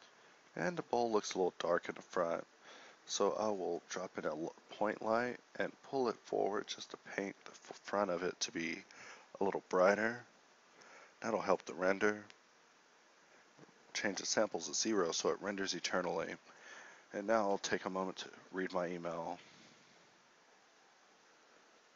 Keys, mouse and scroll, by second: 1.2 KP_0, 2.0 shift+c, 3.4 shift+a, 3.8 g, 13.9 ctrl+Up.